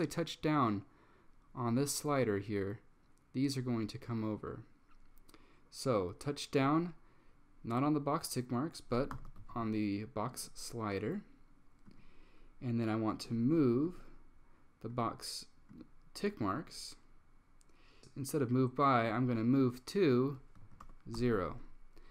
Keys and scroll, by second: 9.0-10.0 typing, 20.7 super+a, 20.9 typing, 21.3 Tab.